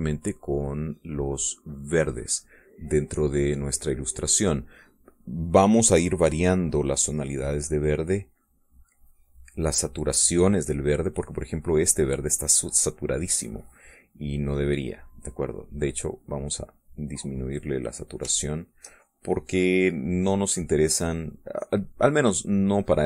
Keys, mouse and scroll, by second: 0.1-4.3 drag, 4.4-6.4 drag, 6.8-10.3 drag, 10.7 middle click, 13.0 middle click, 15.2 click, 16.1-17.4 drag, 18.3 click, 18.8 shift+click, 19.0-20.4 shift+drag, 21.5-23.0 drag.